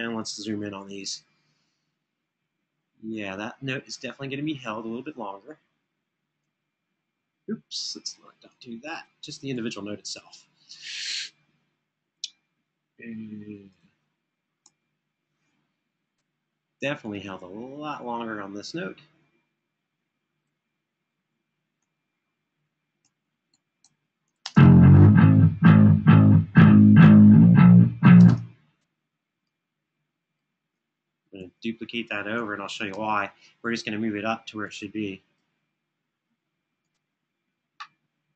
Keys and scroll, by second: 0.4 super+], 5.2 Home, 14.3 Right, 21.1 super+[, 21.6 super+[, 22.5 Escape, 22.9 Escape, 23.3 Escape, 24.2 space, 29.9 space, 31.1 super+f, 32.6 super+d, 33.9 Home.